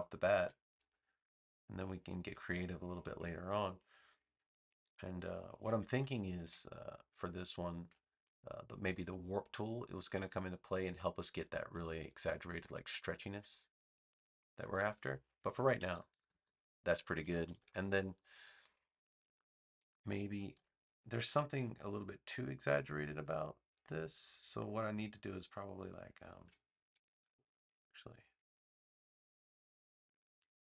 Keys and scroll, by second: 0.3 v, 2.1 space, 15.9 super+-, 17.1 super+=, 20.5 a, 27.1 super+z.